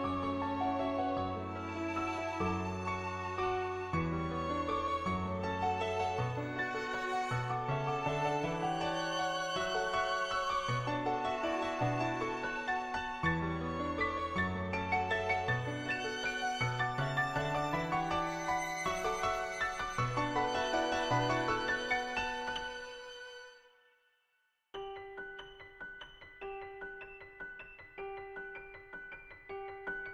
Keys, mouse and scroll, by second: 1.2 ], 1.5 click, 2.2 [, 2.3 [, 2.5 click, 3.5 /, 4.2-5.2 drag, 6.7 [, 6.9 [, 11.6 ], 12.0 [, 12.2 ], 15.9 click, 15.9 /, 20.1 click, 20.8 p, 21.0 click, 22.1 ctrl+z, 22.2 click, 22.8 p, 23.4 click, 23.9 click, 27.9 click, 29.9 click.